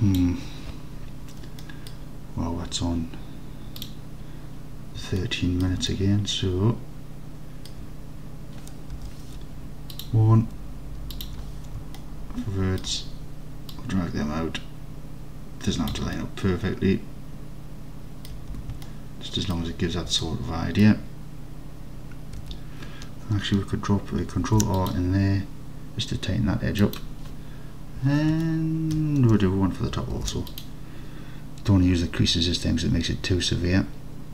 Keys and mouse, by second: 1.7 middle click, 5.2 middle click, 5.9 alt+middle click, 6.8 alt+click, 9.0 1, 12.0 alt+click, 13.8-16.0 drag, 16.2-18.4 alt+drag, 18.6 Tab, 18.9-19.6 alt+drag, 20.3 alt+click, 22.4 Tab, 24.5 ctrl+r, 26.9 click, 28.6 alt+click, 29.0 middle click, 30.2 ctrl+r.